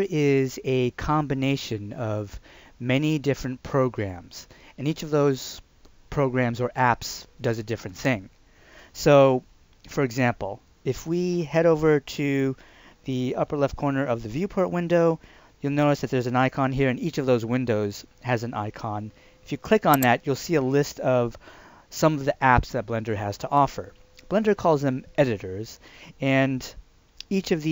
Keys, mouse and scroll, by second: 19.9 click.